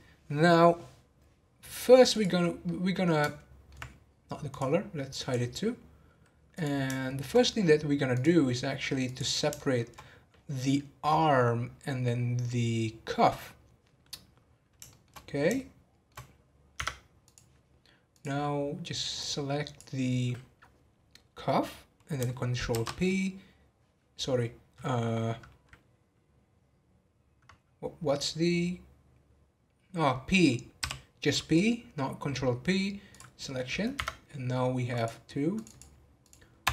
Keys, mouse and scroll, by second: 2.1 click, 2.6-4.5 middle drag, 4.5 click, 5.2 click, 6.5 click, 7.0-7.3 shift+middle drag, 7.3-8.1 scroll up 1, 8.1-9.6 drag, 9.6-12.6 shift+middle drag, 14.9-15.2 shift+middle drag, 15.2 scroll up 1, 15.6-16.8 shift+middle drag, 16.8 Tab, 17.2 click, 18.1-19.3 drag, 22.7 ctrl+p, 34.9 click, 35.5-36.7 drag.